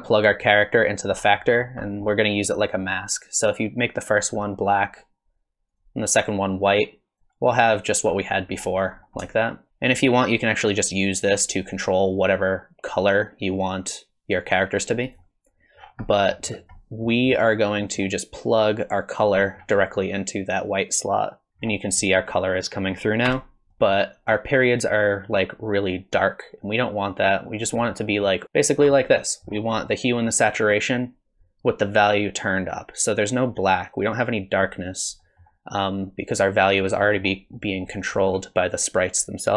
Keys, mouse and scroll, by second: 1.2 middle click, 1.6 scroll up 5, 1.9 middle click, 2.6 click, 5.7 click, 7.5-8.2 scroll up 5, 8.5 scroll down 2, 9.0 scroll up 1, 9.2 shift+middle click, 11.3 click, 15.8 scroll down 5, 16.1 middle click, 16.5 scroll down 2, 16.8 middle click, 17.3 middle click, 18.7 click, 19.4 middle click, 19.6 scroll down 2, 19.8 middle click, 21.0 click, 21.5 scroll up 3, 21.7 scroll down 2, 22.1 middle click, 23.3 KP_0, 23.7 shift+middle click, 23.7 scroll up 8, 23.7 shift+space, 27.8-28.1 scroll up 3, 28.1 middle click, 28.4 ctrl+shift+click, 29.0-30.1 scroll down 11, 30.1 scroll up 2, 35.2 middle click, 36.4 click, 37.0 middle click, 37.6 middle click, 38.2 middle click.